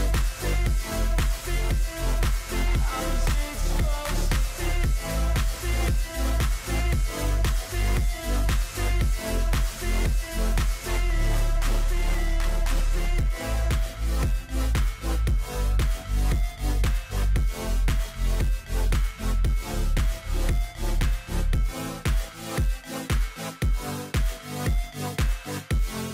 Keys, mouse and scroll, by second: 23.3 ctrl+=, 23.7 ctrl+=, 25.1-25.6 scroll up 4.